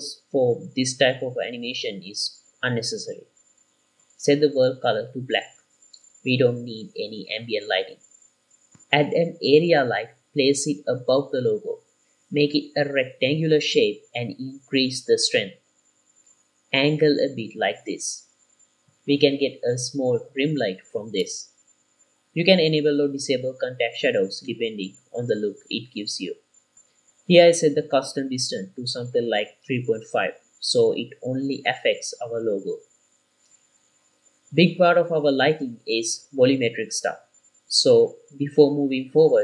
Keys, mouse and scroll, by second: 4.3 click, 5.1-5.4 drag, 8.5 shift+middle click, 8.8 shift+a, 10.7 g, 10.7 z, 11.5 click, 11.9 g, 11.9 z, 12.4 click, 13.4 click, 13.9 click, 14.4 click, 15.3 click, 15.8 KP_0, 17.3 KP_3, 18.6 r, 20.0 click, 21.3 g, 21.5 click, 22.1-22.7 drag, 22.7-23.9 scroll up 4, 23.9 scroll down 2, 24.1 scroll down 3, 24.2-25.0 scroll up 3, 26.1-26.7 drag, 27.5 click, 29.5 click, 29.9 click, 30.2 click, 30.6-31.7 drag, 32.2-33.9 drag.